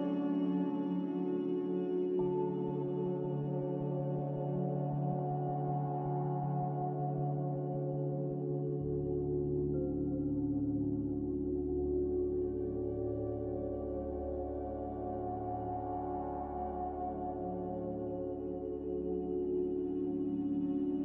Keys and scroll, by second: 2.1 z, 5.1 a, 8.9 m, 12.4 a, 15.9-16.9 typing.